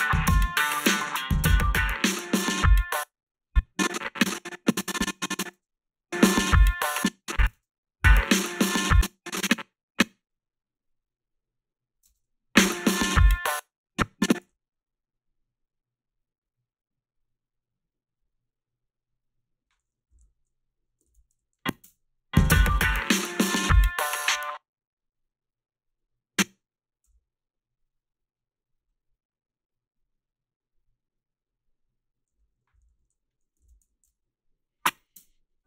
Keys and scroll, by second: 2.7 space, 5.6 space, 6.8 space, 7.5 space, 8.7 space, 12.1 space, 13.4 space, 14.4 f, 20.3 a, 21.1 ctrl+r, 21.3 a, 21.8 space, 21.8 a, 24.3 space, 27.0 f, 33.0 a, 33.9 ctrl+r, 35.2 space.